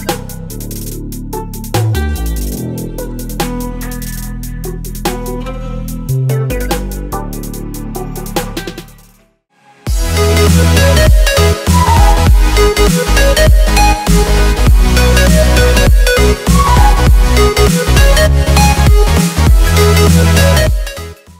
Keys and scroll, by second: 0.8 z.